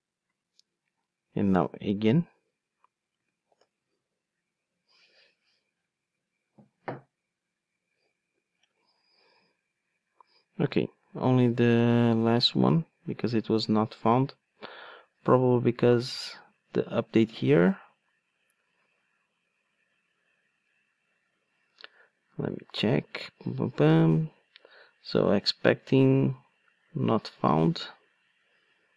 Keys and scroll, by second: 3.5 ctrl+shift+d.